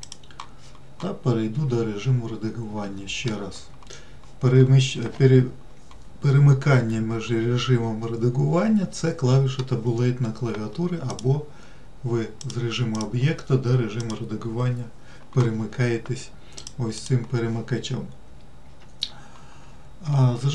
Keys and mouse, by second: 3.1 Tab, 11.6-12.8 drag, 13.4-14.5 drag, 17.1 click.